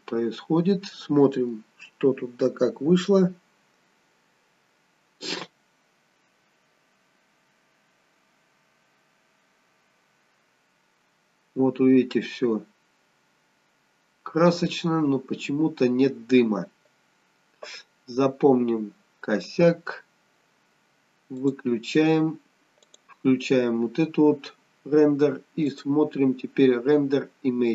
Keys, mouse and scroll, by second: 2.0-2.3 scroll down 1, 6.9-7.5 scroll down 1, 10.1-10.5 scroll down 1, 11.3 scroll down 1, 13.3-13.8 scroll down 1.